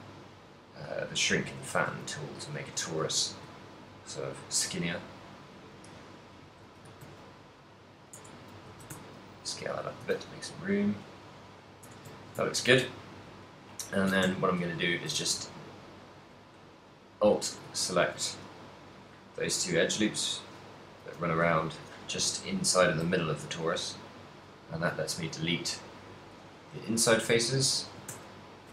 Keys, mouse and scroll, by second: 1.3 shift+click, 1.9 alt+s, 2.9 click, 2.9 g, 6.6 shift+click, 7.1 s, 8.2 Tab, 8.2 click, 8.5 right click, 8.8 s, 10.1 click, 10.5 middle click, 10.5 a, 11.5 right click, 11.9 Tab, 12.2 shift+middle click, 12.7 ctrl+middle click, 13.0 middle click, 14.2 KP_7, 14.3 z, 15.2 a, 15.8 alt+right click, 16.6 alt+shift+right click, 18.0 shift+middle click, 18.3 x, 19.8 o, 20.3 o, 21.2 l, 21.8 c, 22.6 right click, 23.2 x, 25.1 alt+right click, 25.5 middle click, 27.0 e, 27.2 right click, 27.9 s.